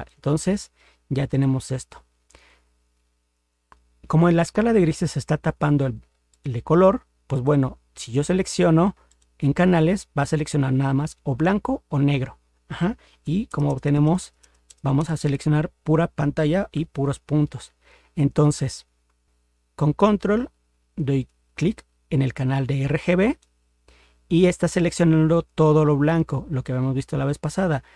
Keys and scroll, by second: 13.5 ctrl++, 16.8 ctrl+0.